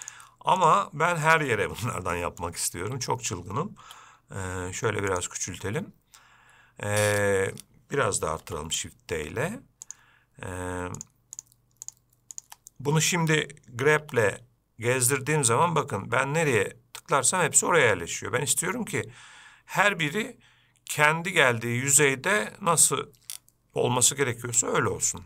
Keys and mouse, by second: 0.3-0.9 shift+drag, 1.5 shift+click, 2.4 middle click, 8.7 shift+d, 12.1 shift+click, 14.2 g.